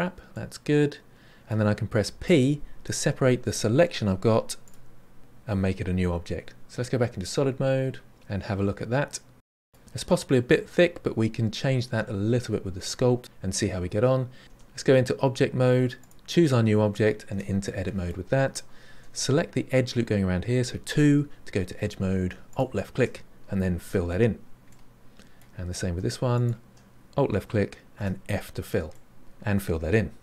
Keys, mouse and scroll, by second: 0.3-2.1 middle drag, 2.1 p, 8.1 click, 8.5-9.7 middle drag, 12.7-14.4 middle drag, 14.4 Tab, 15.9 click, 17.2 Tab, 17.6-18.9 middle drag, 18.9 2, 22.5 alt+click, 23.8 f, 24.6-26.3 middle drag, 26.3 alt+click, 27.9 f, 28.9-30.2 middle drag.